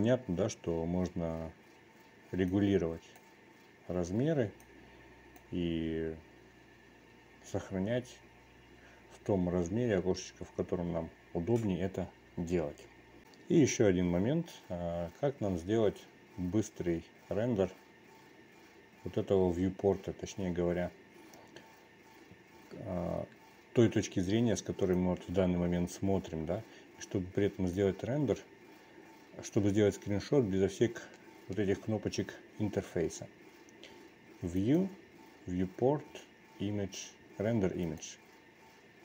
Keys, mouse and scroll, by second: 3.6 click, 5.6-6.4 drag, 25.9-28.8 drag, 35.5-39.0 drag.